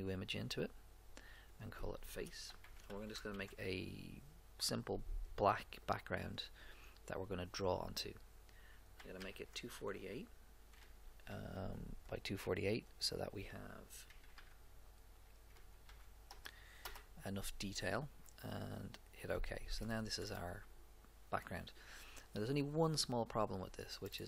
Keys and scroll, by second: 2.4-3.9 typing, 8.9 2, 9.2 0, 10.8 4, 11.3 8, 14.1 2, 14.4 0, 15.6 4, 15.8 8, 16.3 Return.